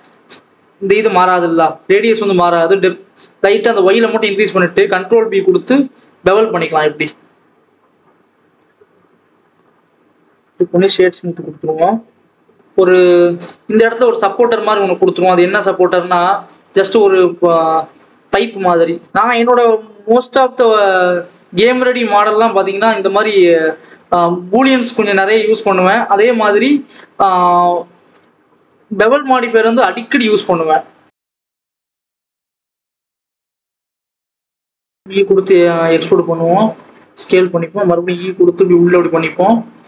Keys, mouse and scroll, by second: 1.5 shift+click, 4.6 ctrl+b, 7.8 alt+a, 8.0 scroll down 2, 8.1 Tab, 8.4 alt+a, 9.3 click, 9.7 right click, 10.4 alt+a, 10.8 click, 12.6-13.1 scroll up 2, 13.1 click, 15.7 click, 16.6-17.2 scroll up 2, 17.2-19.6 scroll down 2, 19.8 click, 20.0 scroll down 1, 20.1 scroll up 1, 20.3-21.3 scroll down 1, 21.3-24.7 typing, 21.7 scroll up 1, 21.8 scroll down 1, 21.9 Tab, 22.3 Tab, 23.2-24.1 scroll up 8, 23.4 Tab, 24.1 scroll down 2, 24.5 scroll up 1, 26.2 r, 27.5 click, 28.7 click, 28.9 scroll up 1, 29.0-29.3 scroll down 1, 29.3 r, 31.0-31.4 scroll down 1, 31.4-31.7 scroll up 1, 31.7 click, 32.8 scroll up 4, 32.9 click, 33.3 Tab, 33.4-33.9 scroll up 2, 33.7 click, 33.9-34.6 scroll down 3, 34.6 scroll up 1, 34.9 e, 36.4 s, 37.7 e, 38.2 s.